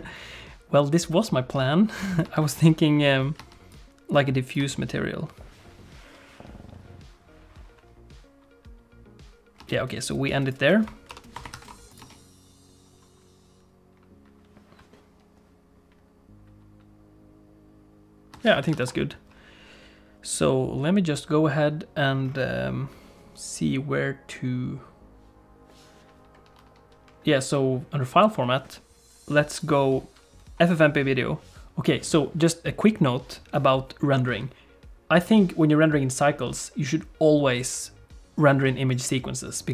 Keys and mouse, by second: 0.0-2.4 drag, 2.3 space, 3.4 space, 3.8 click, 9.6 space, 10.1 click, 11.1 ctrl+End, 11.6 ctrl+s, 12.0 click, 12.0 space, 18.4 space, 18.7 ctrl+s, 20.2 click, 29.6-31.3 drag.